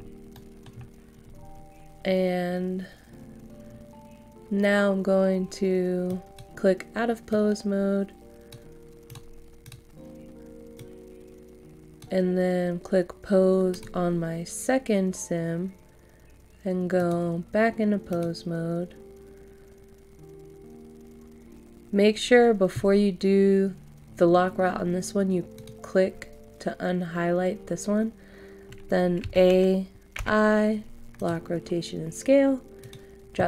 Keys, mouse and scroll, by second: 0.3 middle click, 0.7 scroll up 1, 6.0-12.8 drag, 29.2-30.2 typing, 31.1-33.4 drag.